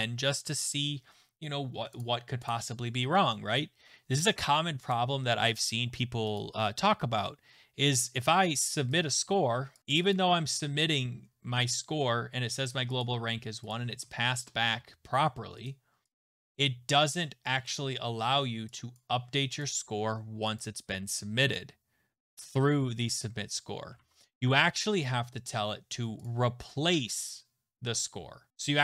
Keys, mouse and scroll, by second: 0.4 click, 2.0 click, 2.5 click, 5.0 click, 9.1-10.0 click, 9.8 click, 9.9 click, 10.1 click, 13.0 click, 14.1 click, 15.7 click, 16.1 click, 17.8 click, 19.0 click, 19.6 click, 20.6 click, 21.5 click, 24.0 alt+Tab, 24.3 alt+Tab, 24.3 click, 26.3 click, 28.5 click.